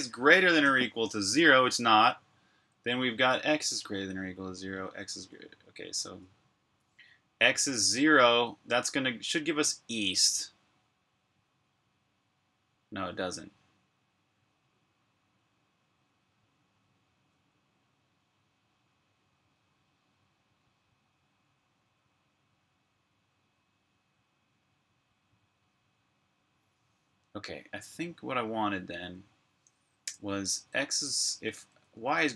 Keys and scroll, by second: 29.8 BackSpace, 30.8 Tab, 31.1 Tab, 31.3 Tab, 31.4 Tab, 31.8-32.3 typing.